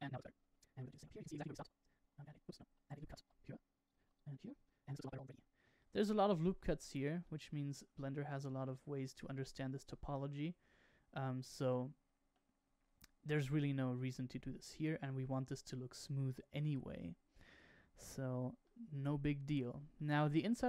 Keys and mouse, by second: 0.3 middle click, 0.8 shift+middle click, 1.6 Tab, 2.1 ctrl+r, 2.7 ctrl+z, 3.2 ctrl+r, 4.0 ctrl+r, 4.6 middle click, 5.1 shift+middle click, 5.3 middle click, 5.7 shift+middle click, 7.2-8.2 middle drag, 8.6 shift+middle click, 11.3 middle click, 15.2 Tab, 18.6-19.6 middle drag, 19.9-20.3 shift+middle drag.